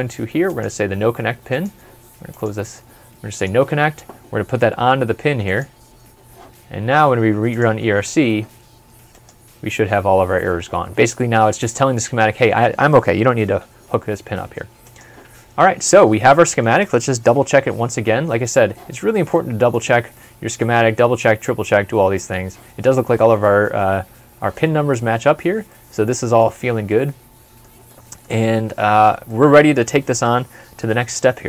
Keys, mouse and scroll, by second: 15.5 scroll up 1, 15.8 scroll down 1, 16.3 middle click, 17.6 super+Left, 19.3 middle click, 25.7 middle click, 30.8 ctrl+s.